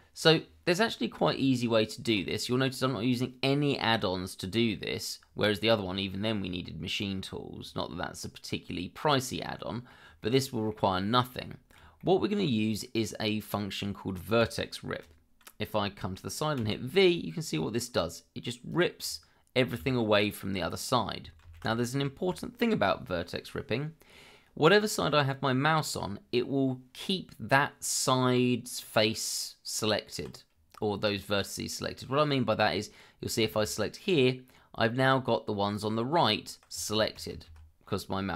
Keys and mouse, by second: 1.2 Tab, 9.3 middle click, 10.2 middle click, 11.5 shift+middle click, 12.0 middle click, 16.6 v, 18.7 click, 21.4 ctrl+z, 33.4 v, 35.7 click, 37.3 ctrl+z.